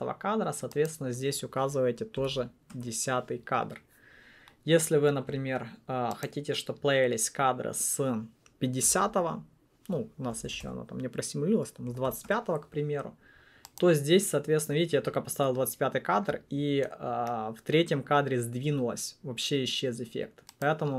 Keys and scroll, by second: 2.3-2.9 typing, 2.9 Return, 8.8-12.5 typing.